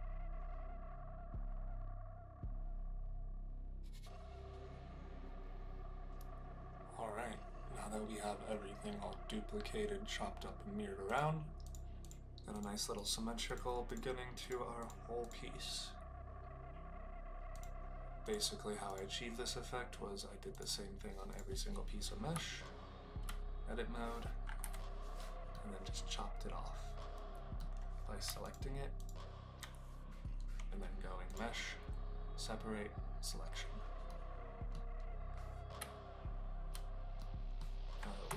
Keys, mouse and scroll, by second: 0.0-0.3 typing, 0.0 alt+d, 0.3 alt+d, 0.5 ctrl+l, 0.7 click, 0.8 Tab, 0.9 click, 1.1 click, 1.3 click, 1.4 click, 1.6 click, 1.8 Tab, 1.8 KP_Divide, 2.0-5.7 typing, 2.1 ctrl+l, 2.3 Tab, 2.5 ctrl+right click, 2.6 ctrl+z, 2.6 alt+d, 2.8 alt+d, 3.4 ctrl+l, 3.5 Tab, 3.6 shift+click, 3.7 alt+click, 4.0 ctrl+l, 4.0 Tab, 4.1 shift+KP_Divide, 4.6 click, 5.0 alt+d, 5.1 click, 5.3 ctrl+l, 5.4 shift+middle click, 5.9 shift+middle click, 11.1 click, 12.9 click, 15.2 click, 17.5 click, 18.2 click, 21.2 click, 22.3 Tab, 25.5-27.5 middle drag, 31.3-33.8 drag, 34.0 middle click, 35.7 Tab, 37.1-37.5 middle drag.